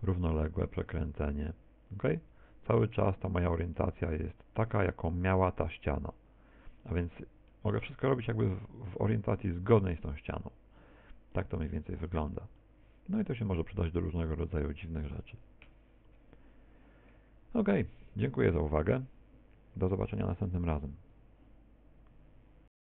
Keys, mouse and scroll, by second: 0.1 click, 0.7 r, 1.3 click, 2.1 click, 4.3 click, 6.9 middle click, 10.8 middle click, 14.3 shift+middle click.